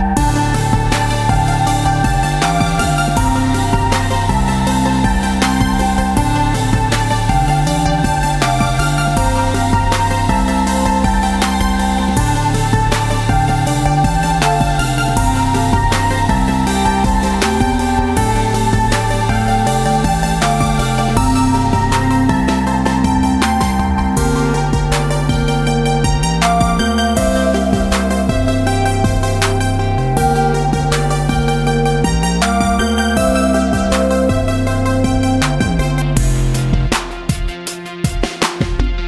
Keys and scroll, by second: 5.1 ctrl+d, 5.2 ctrl+d, 5.4 ctrl+d, 5.7 ctrl+d, 6.0 ctrl+d, 6.3 ctrl+d, 6.6 ctrl+d, 6.9 ctrl+d, 7.3 ctrl+d, 19.9 ctrl+d, 20.2 ctrl+d, 20.4 ctrl+d, 21.2 space, 22.2 space, 22.8 ctrl+-, 24.3 ctrl+d, 24.6 ctrl+d, 24.9 ctrl+d, 25.2 ctrl+d, 25.7 ctrl+d, 26.4 space, 27.0 space, 28.0 ctrl+space, 28.3 ctrl+d, 29.2 space, 29.6 space, 31.4 ctrl+-, 32.4 space, 32.9 space, 38.5 ctrl+space.